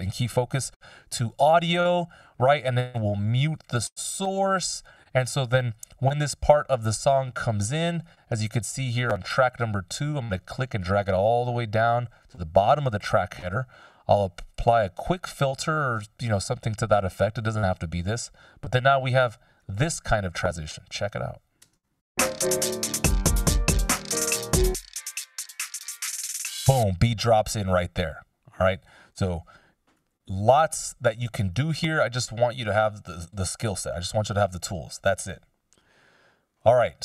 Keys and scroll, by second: 1.2 ctrl+b, 4.5 Return, 22.1 space, 26.6 space, 30.2 super+z, 30.8 super+z, 32.4 super+z, 36.8 F16.